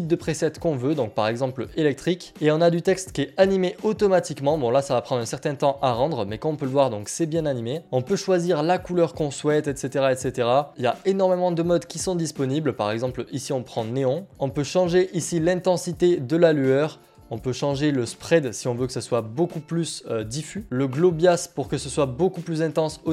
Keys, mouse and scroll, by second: 2.3 click, 4.2-4.6 scroll, 4.6 click, 5.6 click, 8.3 click, 10.7 click, 11.9 click, 14.3 click, 15.3 click, 17.0-20.6 drag.